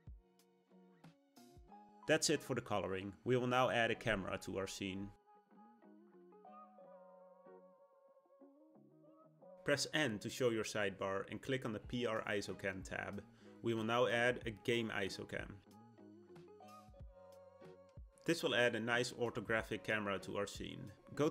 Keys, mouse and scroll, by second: 1.9 click, 2.5 scroll down 1, 2.7-5.7 middle drag, 6.0-6.6 scroll down 1, 6.6-9.1 middle drag, 9.1 click, 9.7 n, 16.0-18.9 drag.